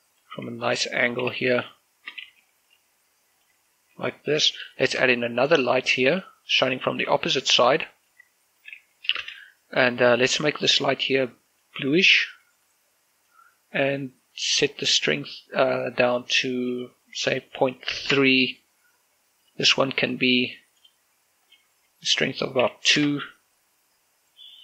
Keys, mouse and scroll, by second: 0.1 click, 0.5 g, 0.9 click, 2.3-5.7 typing, 2.7 click, 3.4 click, 4.0 click, 4.6 click, 5.5 click, 6.5 click, 6.9 shift+middle click, 7.4 g, 8.1 click, 8.2 r, 8.7 click, 8.9 g, 9.1 click, 9.2 shift+space, 10.7-14.4 drag, 17.3-18.0 typing, 18.2 Return, 19.5 right click, 20.5 click, 22.7 2, 23.1 Return.